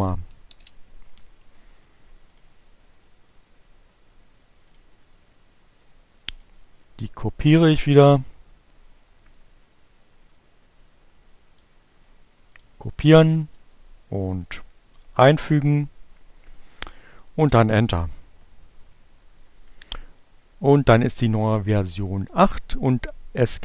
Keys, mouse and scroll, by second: 1.5 click, 3.9 click, 6.1 click, 8.0-11.4 drag, 11.5 right click, 12.1 click, 13.0 click, 13.9 right click, 15.0 click, 16.5 Return, 19.1 click, 22.8 click.